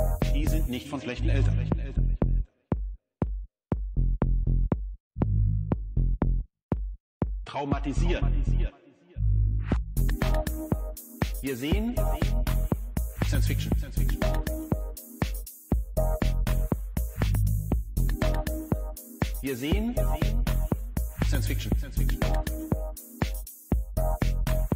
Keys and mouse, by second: 6.4 n, 9.6-16.0 drag, 13.2 1, 18.6 n, 20.7-21.7 drag.